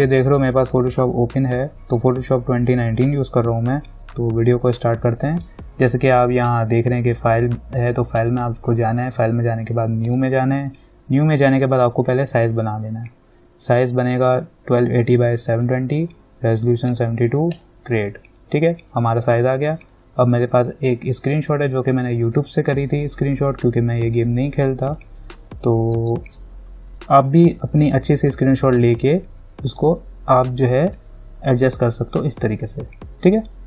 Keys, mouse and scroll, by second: 7.5 click, 10.3 click, 13.9 click, 20.0-25.1 drag, 26.4 ctrl+-, 27.8-31.6 alt+drag, 31.7-33.6 drag.